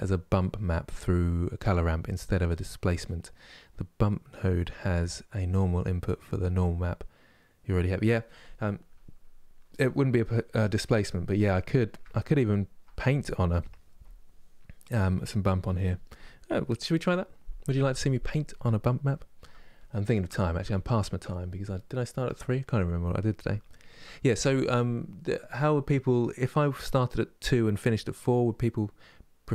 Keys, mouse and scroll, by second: 8.6-9.7 middle drag, 9.7-11.2 drag, 11.2-29.5 middle drag.